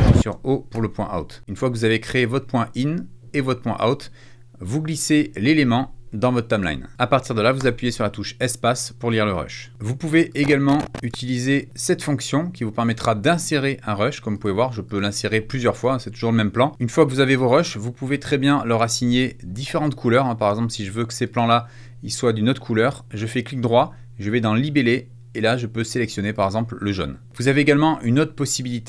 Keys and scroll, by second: 0.1 space, 0.6 o, 7.5 space, 9.7 BackSpace.